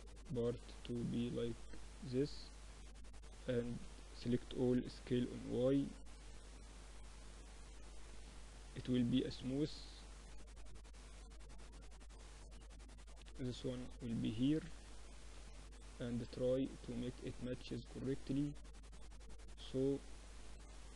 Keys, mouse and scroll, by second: 1.4-3.6 middle drag, 2.6 a, 2.8 a, 3.6 s, 6.1 Tab, 7.5 t, 8.3-10.2 drag, 8.6 t, 10.4-12.4 middle drag, 12.4-13.4 drag, 12.4-13.4 right drag, 13.4 middle click, 13.9 click, 14.4 KP_1, 16.8 Tab, 17.9 z, 18.6 a, 20.6 middle click.